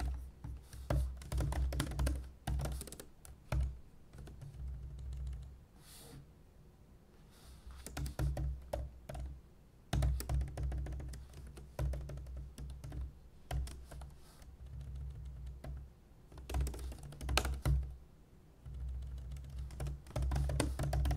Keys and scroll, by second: 0.0 super+w, 0.9 super+n, 1.0-3.1 typing, 20.2-21.1 typing.